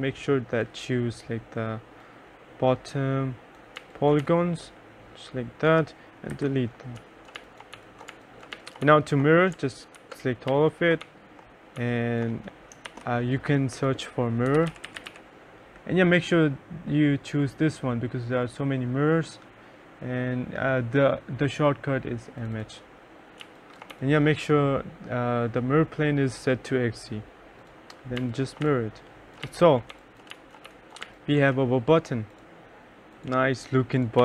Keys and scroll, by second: 3.8 2, 4.3 3, 6.4 Delete, 6.8-9.4 typing, 10.0 ctrl+a, 10.6 2, 11.1 1, 13.0 shift+c, 14.3-15.7 typing, 23.5 2, 24.0 1, 28.2-31.6 typing.